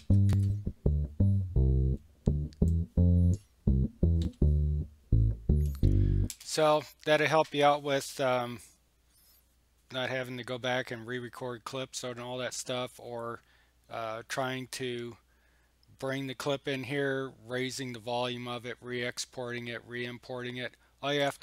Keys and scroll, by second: 0.0-0.5 typing, 4.2 l, 6.3 space.